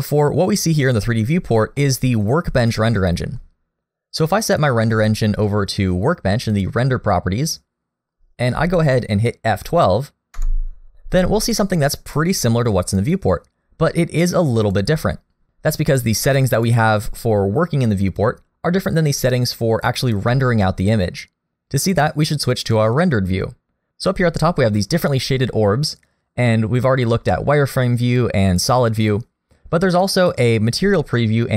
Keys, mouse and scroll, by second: 1.2-1.8 scroll down 1, 1.8 middle click, 5.1 click, 10.7 F12, 13.9 F12, 26.8 click, 28.5 click.